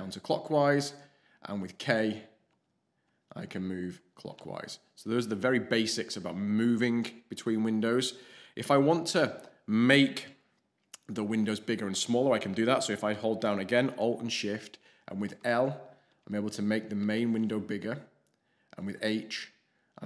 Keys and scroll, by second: 1.6 alt+shift+k, 2.5 alt+shift+k, 3.0 alt+shift+k, 3.5 alt+shift+k, 15.2 alt+shift+l, 16.0 alt+shift+l, 17.0 alt+shift+l, 18.8 alt+shift+h, 19.3 alt+shift+h.